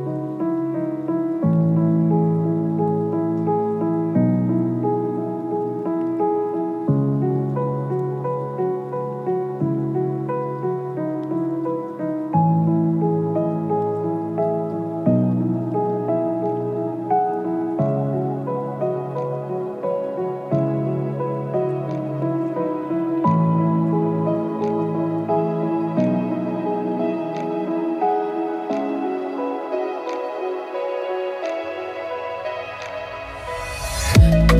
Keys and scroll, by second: 0.0 b, 0.4 ctrl+space, 3.0 space, 11.1 space, 12.0 space, 18.9 Page_Down, 19.2 ctrl+KP_0, 19.5 ctrl+KP_Subtract, 20.1 ctrl+KP_Subtract, 21.2 ctrl+KP_0, 21.4 ctrl+KP_Add, 22.5 b, 24.9 space, 30.7 j.